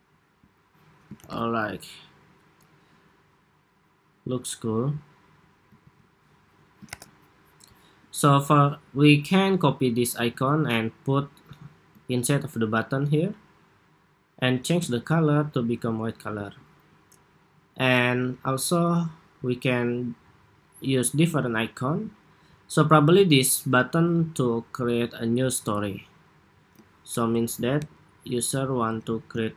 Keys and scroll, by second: 1.1 super+-, 5.5 super+s, 6.6 super+=, 10.0 super+c, 11.9 shift+super+v, 14.6 ctrl+c, 27.0 alt+Down, 27.6 alt+Down.